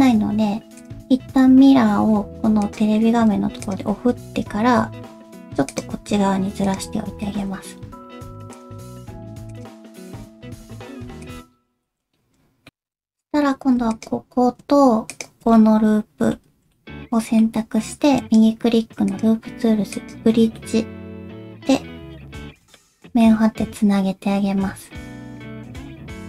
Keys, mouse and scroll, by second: 2.6 click, 3.6 alt+click, 4.2 g, 6.6 click, 7.2 alt+z, 7.8-8.5 scroll up 1, 8.5 click, 8.8 g, 10.1 click, 10.4 g, 11.5 scroll down 1, 11.8 alt+z, 12.1 scroll down 1, 12.7 shift+middle click, 12.7-13.8 scroll up 1, 13.9 alt+click, 15.1 alt+shift+click, 15.5 middle click, 16.5 alt+z, 16.7 middle click, 18.2 right click, 20.5 middle click, 22.9 alt+z, 23.2 middle click.